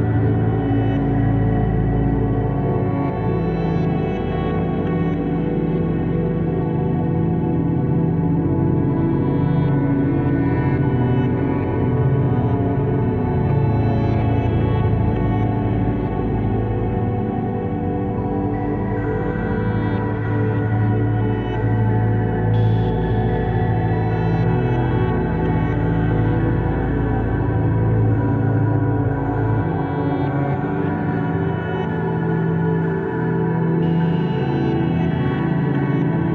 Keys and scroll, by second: 0.0 KP_7, 0.0 Return, 0.7 KP_1, 0.8 KP_0, 0.9 Return, 1.2 t, 1.8 ctrl+v, 9.5 ctrl+z, 11.2-13.0 typing, 14.8 ctrl+z.